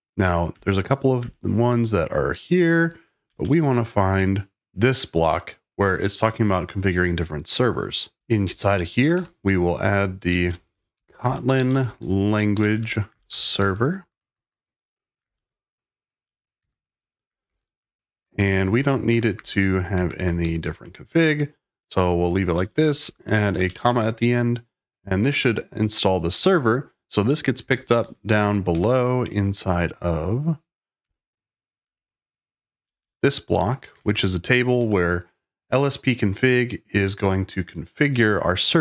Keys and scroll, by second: 0.0-1.1 typing, 2.3-3.8 typing, 7.9-16.2 typing, 16.5 Return, 17.3-20.6 typing, 21.1 Escape, 22.3-24.3 typing, 27.1-28.4 typing, 28.7 Escape, 28.8 Escape, 30.8-33.9 typing, 34.7 Escape.